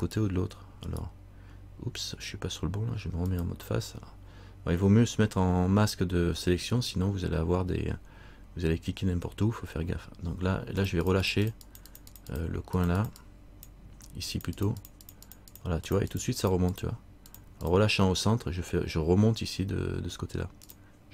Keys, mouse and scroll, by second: 0.3 right click, 3.4 click, 9.8-11.0 scroll up 2, 11.0-13.4 click.